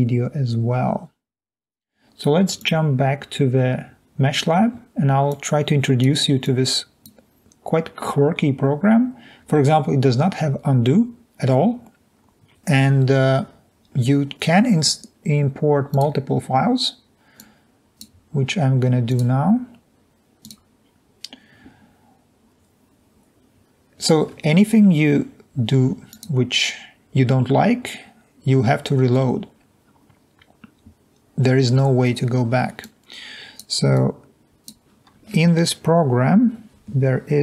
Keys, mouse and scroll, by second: 20.4 click, 26.2 click, 33.0 click, 34.0 click.